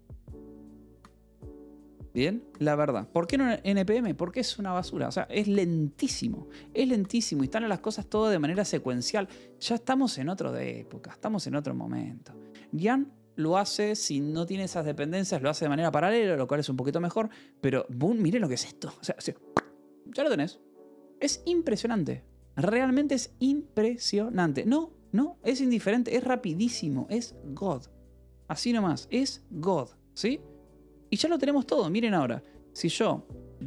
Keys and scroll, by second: 28.9 alt+h, 29.6 alt+l, 32.0-33.6 typing.